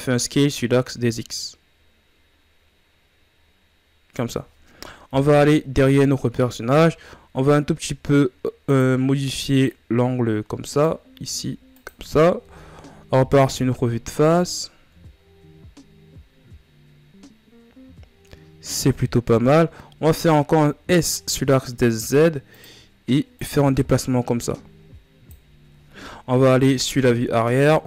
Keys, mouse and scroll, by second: 4.6 KP_3, 6.4 r, 9.2-10.8 drag, 10.8 r, 12.0 KP_1, 13.9-14.4 ctrl+scroll down 2, 14.9 scroll up 2, 19.4 s, 22.9-25.9 drag, 25.9 KP_3, 27.5 r.